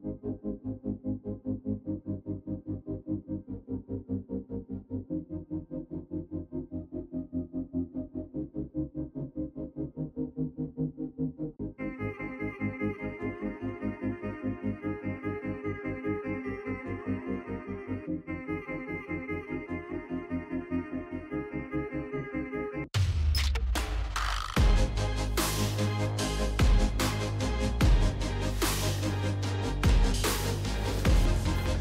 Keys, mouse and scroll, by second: 1.2 click, 2.4 click, 3.1 click, 4.0-6.0 typing, 5.3 click, 7.1-12.3 typing, 13.7 click, 15.1 click, 15.8-18.8 typing, 20.8 click, 21.0 click, 24.3-30.1 typing, 26.8 middle click, 29.3 middle click, 31.5 click.